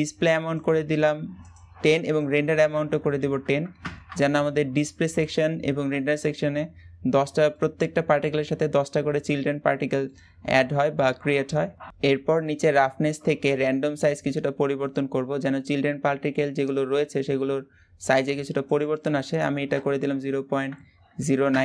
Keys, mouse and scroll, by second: 2.0-7.4 drag, 7.4-11.9 middle drag, 11.9 click, 14.6 click, 17.3-21.5 drag.